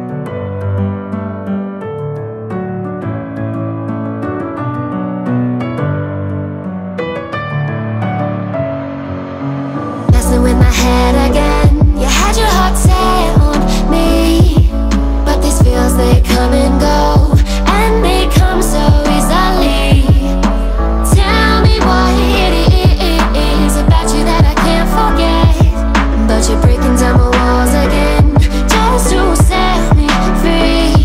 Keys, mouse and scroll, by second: 10.3 f, 14.5 click, 16.0 click, 17.8 x, 20.1-31.0 drag.